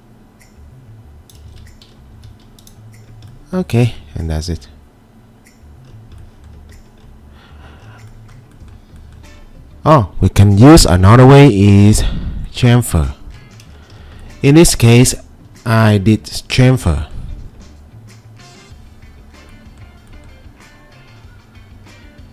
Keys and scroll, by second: 1.4 ctrl+z, 2.1 2, 15.5 2.